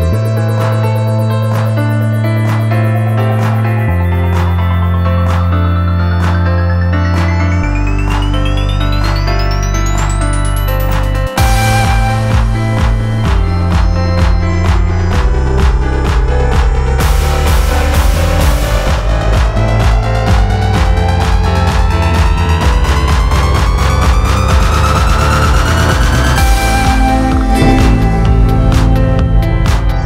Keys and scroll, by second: 1.1 ctrl+z, 2.5 l, 4.3 k, 5.9 -, 6.0 0, 6.1 Return, 7.5 l, 8.9 l, 9.2 BackSpace, 9.4 k, 10.8 -, 10.9 9, 11.0 Return, 13.9 ctrl+z, 16.3 ctrl+z, 22.6 ,, 23.2 ,, 23.9 ., 27.7 ctrl+z, 27.9 ,.